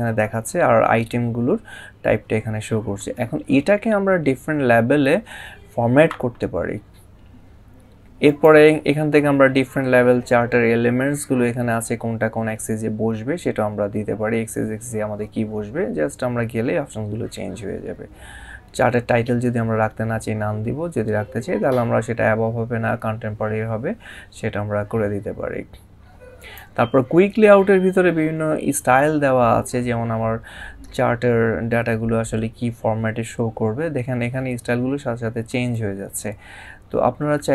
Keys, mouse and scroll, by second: 8.1 click, 26.2 click.